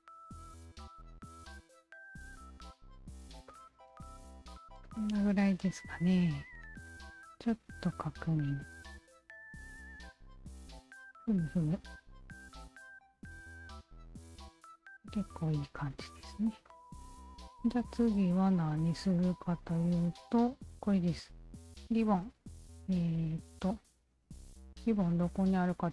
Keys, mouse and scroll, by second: 0.5 Tab, 1.9-2.9 shift+drag, 3.2 Tab, 3.5 click, 3.9 alt+right click, 4.5-6.0 alt+drag, 6.2-6.5 alt+drag, 7.5 alt+click, 8.3 alt+click, 9.3-13.5 alt+drag, 14.6 alt+click, 16.2 alt+click, 16.7 alt+click, 17.9 alt+click, 19.2 alt+click, 22.8 alt+click, 25.8 alt+click.